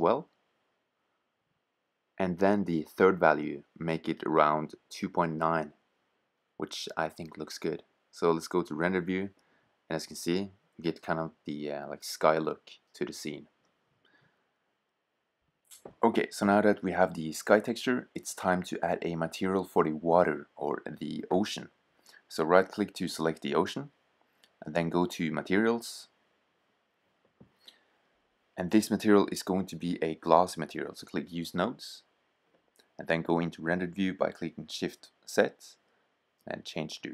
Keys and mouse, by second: 3.3-5.2 drag, 7.8 shift+z, 11.4 shift+z, 22.9-24.8 drag, 28.4-30.4 drag, 32.3 shift+z, 32.5 click, 35.2-37.1 drag.